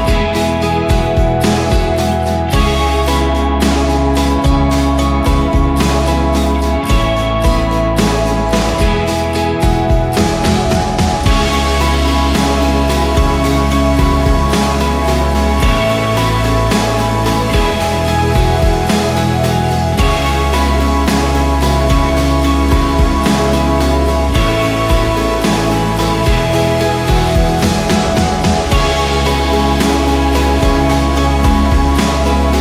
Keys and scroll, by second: 0.4-1.6 typing, 12.0 ctrl+v, 14.1 ctrl+d, 14.8-15.7 typing, 19.2 ctrl+d, 19.7 ctrl+-, 20.4 ctrl+=, 23.6 Return, 25.3 Return, 26.6 Return, 28.5 v, 30.1 ctrl+d, 31.4-32.6 typing.